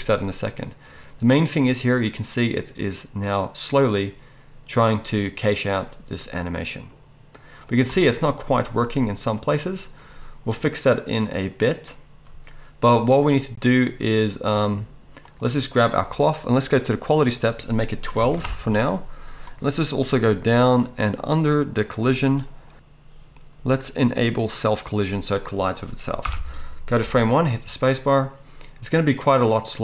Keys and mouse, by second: 7.9 space, 15.3-17.2 middle drag, 17.2-24.7 drag, 24.7-29.8 middle drag, 26.2 shift+Left, 27.0 space.